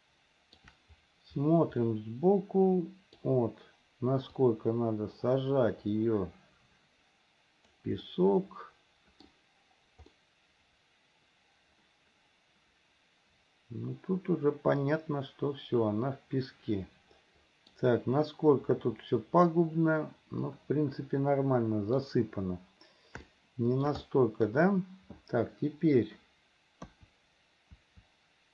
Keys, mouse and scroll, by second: 2.0-3.4 middle drag, 4.7-7.9 drag, 8.3-9.5 middle drag, 10.3-17.9 middle drag, 18.4-22.3 middle drag, 23.5 shift+middle click, 24.3 middle click, 27.0 KP_2, 27.9 KP_3.